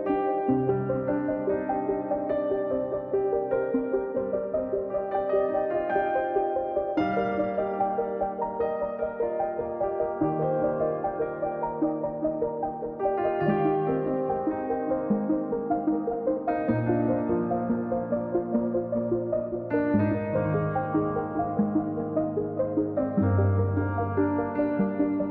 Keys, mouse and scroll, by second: 1.0-2.2 drag, 3.6 middle click, 4.0-4.4 scroll down 3, 4.4 click, 4.8 scroll down 1, 4.9 middle click, 5.3-5.7 scroll up 2, 5.7 click, 6.5 middle click, 6.7 scroll up 3, 6.9 scroll down 2, 7.0 middle click, 7.5 click, 8.1 middle click, 8.4-9.6 drag, 9.6 middle click, 10.1-11.3 drag, 11.8 middle click, 12.1 click, 12.6 scroll down 3, 12.8 middle click, 13.3 KP_1, 13.6-14.6 scroll up 4, 14.2 click, 14.6-15.8 drag, 24.2-25.3 drag.